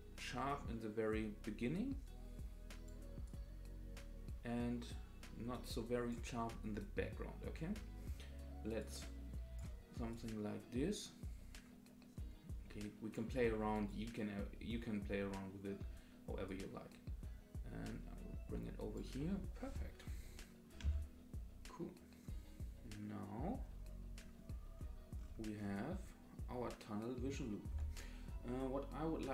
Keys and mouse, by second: 3.2-6.1 drag, 8.9 click, 10.2-13.2 drag, 16.5-19.1 drag, 20.8 space, 27.7 space.